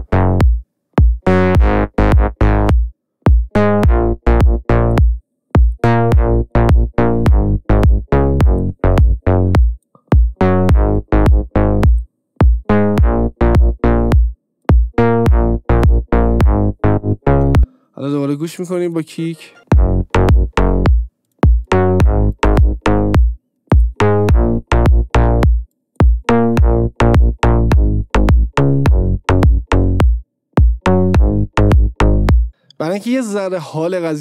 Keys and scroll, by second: 17.6 space, 19.7 space, 33.1 ctrl+d.